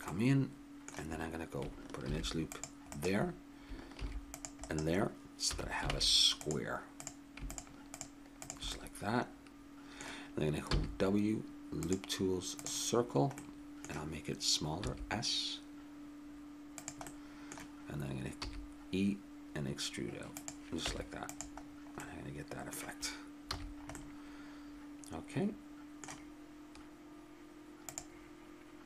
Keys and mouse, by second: 2.1 ctrl+r, 3.9 ctrl+r, 5.5 a, 5.9 ctrl+Tab, 7.0-8.7 right drag, 8.7-10.2 drag, 10.7 w, 13.4-15.2 middle drag, 14.8 s, 17.2-20.3 middle drag, 18.4 e, 20.8 Tab, 23.5 a.